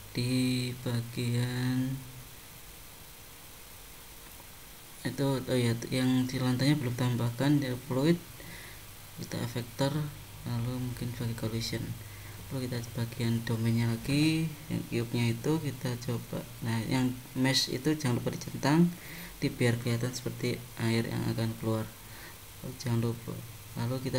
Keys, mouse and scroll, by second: 0.0 super+Tab, 0.7 super+click, 3.0 click, 7.6 click, 8.5 click, 12.0 click, 13.5-16.5 scroll down 20, 16.5-18.3 scroll down 1, 18.3 click, 20.0-20.9 scroll down 9.